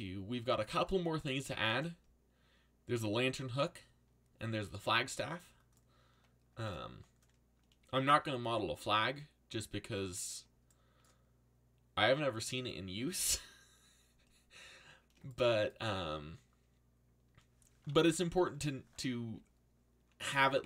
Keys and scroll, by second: 19.2 z, 20.4 z.